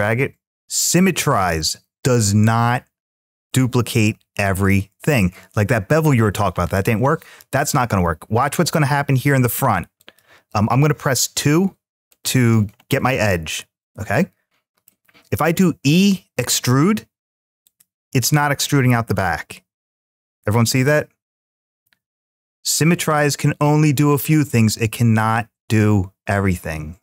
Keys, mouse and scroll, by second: 0.6 shift+middle click, 8.9 click, 9.8 click, 11.2 2, 11.9 click, 12.7-14.7 middle drag, 16.2 e, 17.5 click, 18.0-21.6 middle drag.